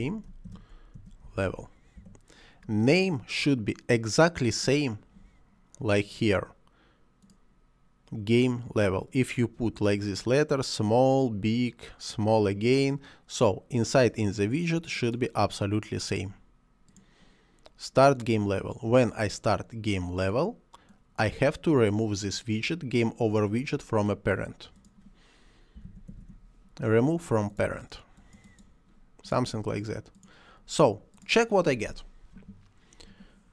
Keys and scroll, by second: 0.0-2.0 typing, 25.8 p, 25.9 a, 26.1 r, 26.3 e.